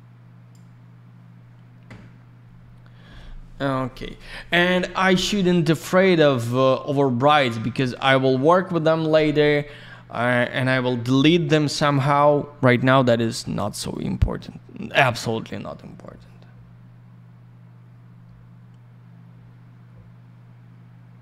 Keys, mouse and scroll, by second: 2.1 scroll down 1, 5.9 scroll up 1, 8.0-8.7 scroll down 1, 13.8 click, 13.9 click, 15.0 click.